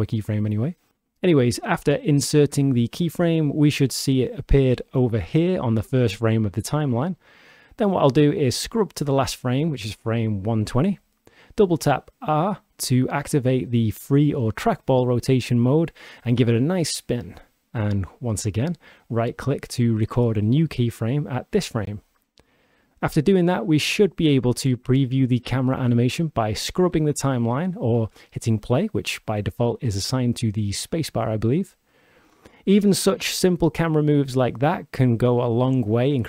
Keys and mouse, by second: 8.5-10.4 shift+drag, 11.8 r, 12.2 r, 18.1 click, 20.1-22.6 drag, 23.7-26.4 shift+drag.